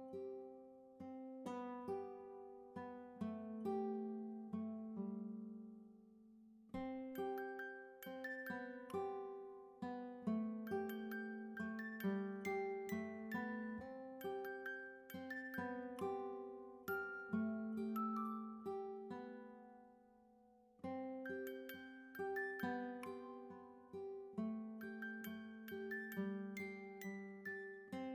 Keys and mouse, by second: 1.4 click, 1.7 BackSpace, 2.2 3, 3.5 click, 3.7 BackSpace, 4.4 4, 6.6 click, 7.1 BackSpace, 7.8 2, 9.2 click, 9.5 BackSpace, 10.0 3, 11.2 click, 11.4 BackSpace, 11.9 4, 12.9 click, 14.8 click, 16.5 click, 22.7 click, 25.5 click, 27.8 click.